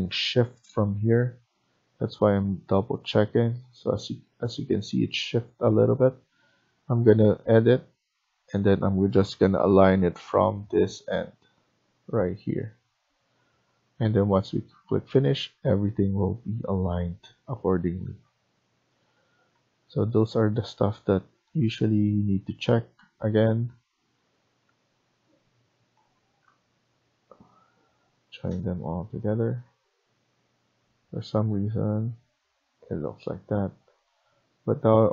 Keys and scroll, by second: 4.3 Escape, 9.2-9.7 typing, 15.0 Escape, 15.3 Escape, 19.4 Escape, 28.1 Escape.